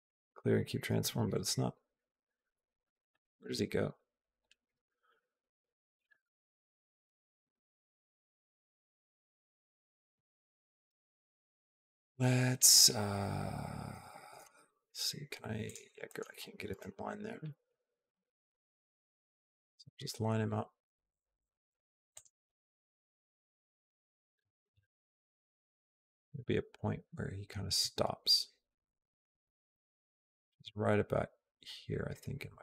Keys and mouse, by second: 1.7 q, 2.6 middle click, 4.9 KP_Decimal, 5.9-7.0 middle drag, 7.4 shift+middle click, 8.0-9.5 middle drag, 10.2 shift+middle click, 14.2 g, 15.9 middle click, 16.5 KP_0, 17.9 g, 22.3 click, 24.0-32.6 drag.